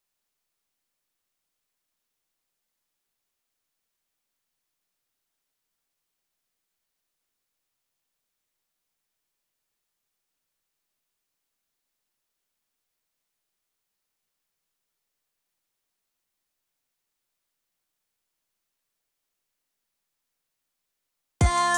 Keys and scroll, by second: 2.1-2.9 typing, 4.0-5.2 typing, 5.5 Return, 17.6-20.7 typing.